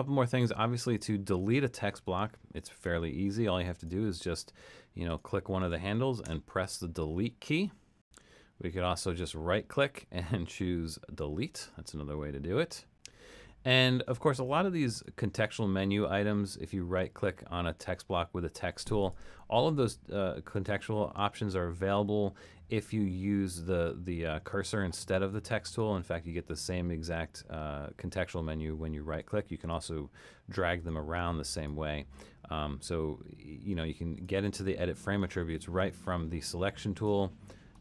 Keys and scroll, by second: 6.3 BackSpace.